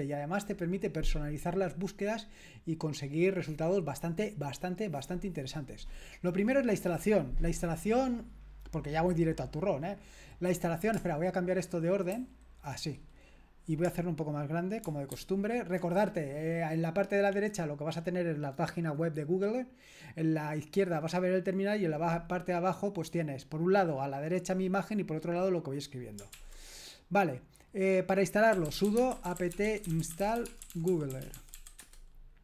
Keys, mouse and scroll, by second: 6.6-11.0 scroll down 1, 11.0-12.3 scroll down 1, 12.3 super+h, 15.1 ctrl+alt++, 26.3 ctrl+l, 28.3-31.8 typing.